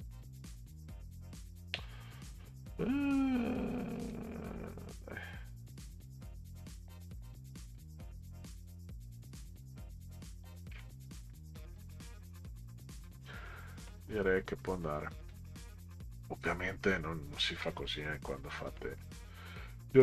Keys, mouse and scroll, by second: 4.1-6.6 drag, 7.7-10.5 drag, 11.2 Delete, 15.3 click, 15.8 middle click, 17.3 ctrl+scroll down 2, 19.3 click.